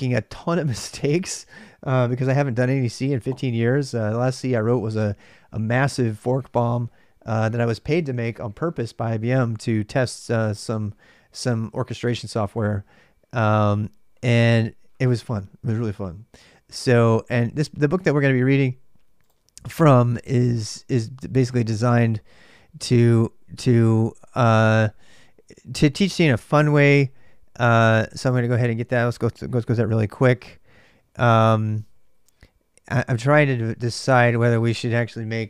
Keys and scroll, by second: 29.6 ctrl+c, 30.5-34.1 typing.